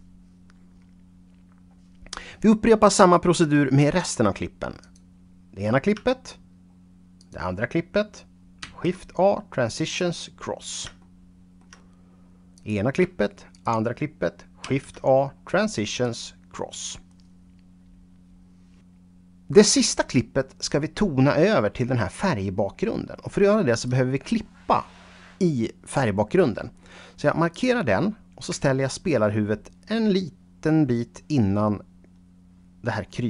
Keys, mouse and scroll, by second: 4.9 click, 7.3 shift+click, 8.7 shift+a, 9.9 click, 11.1 shift+middle click, 12.6 click, 13.6 shift+click, 14.7 shift+a, 16.1 click, 20.1 right click, 27.5 click, 28.9-33.2 shift+right drag.